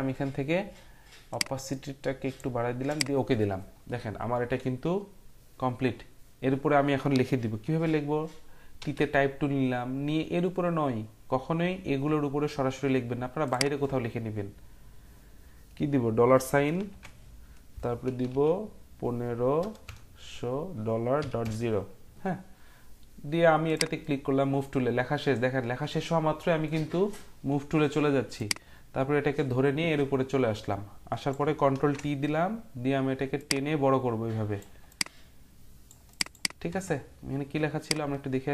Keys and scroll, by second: 8.8 t, 16.7 shift+4, 18.0-18.3 typing, 19.4-21.7 typing, 31.8 ctrl+t.